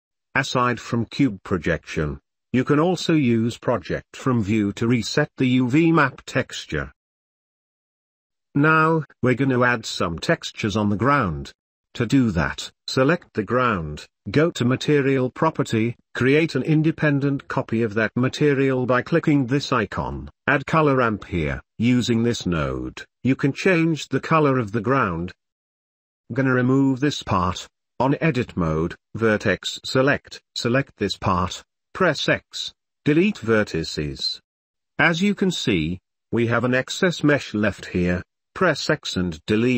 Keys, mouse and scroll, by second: 0.0-0.7 typing, 0.2 ctrl+z, 0.2 Tab, 0.3 middle click, 0.4 Tab, 0.5 middle click, 0.6 middle click, 0.9 Tab, 1.0 middle click, 1.1 shift+click, 1.3 ctrl+z, 1.4 shift+middle click, 2.1 ctrl+s, 2.2 Tab, 2.4 ctrl+s, 2.5 u, 2.6 g, 3.0 Tab, 3.1 shift+middle drag, 3.5 middle drag, 3.8 ctrl+shift+middle click, 4.0 p, 4.1 middle click, 4.4 ctrl+z, 4.5 ctrl+z, 4.6 p, 5.1 ctrl+z, 5.2 ctrl+z, 5.2 ctrl+z, 5.5 ctrl+s, 5.7 g, 6.4 Tab, 6.5 u, 11.8 Home, 13.2 middle click, 14.0 click, 15.0 g, 16.9 click, 20.5 click, 21.1 ctrl+s, 21.7 shift+a, 25.3 Tab, 25.6 click, 26.8 ctrl+z, 27.4 KP_1, 28.9 middle click, 30.7 KP_1, 31.6 middle click, 33.5 x, 35.1 Tab, 35.7 shift+click, 38.0 x, 38.3 x.